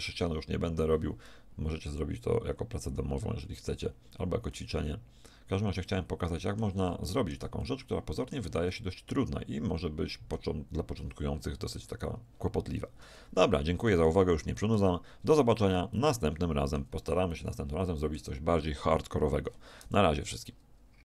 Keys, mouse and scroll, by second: 2.8 middle click, 4.5-6.4 middle drag, 7.8-10.6 middle drag, 11.9-13.9 middle drag, 14.1-16.6 middle drag, 17.4-19.1 middle drag, 19.4-21.1 middle drag.